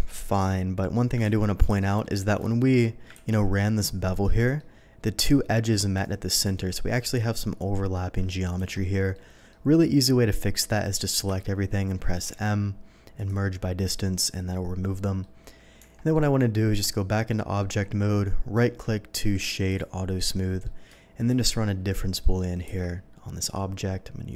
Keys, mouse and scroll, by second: 1.2 ctrl+z, 1.7 ctrl+z, 2.0 middle click, 2.4 shift+middle drag, 3.2 ctrl+z, 4.1 middle click, 5.9 click, 8.6 Escape, 9.1 middle click, 11.2 a, 12.2 m, 13.1 click, 14.9 middle click, 15.8 Tab, 16.1-17.3 middle drag, 17.6 middle click, 18.6 right click, 19.7 click, 20.1-20.6 middle drag, 21.2 shift+click, 22.2 shift+middle drag, 22.6 q.